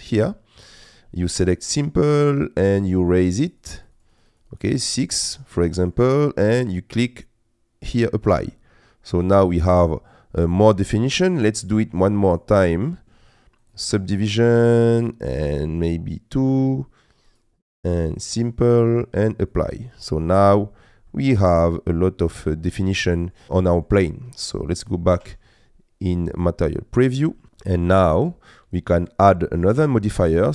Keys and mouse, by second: 1.6 click, 2.9 click, 3.7 click, 4.0 click, 4.4 click, 5.2 middle click, 7.0-8.4 drag, 9.2-10.7 middle drag, 11.1 middle click, 17.4 click, 18.2 click, 18.8 click, 20.2 middle click, 21.1-22.3 middle drag, 23.1 middle click, 23.7 shift+middle click, 25.2 z, 27.4 middle click.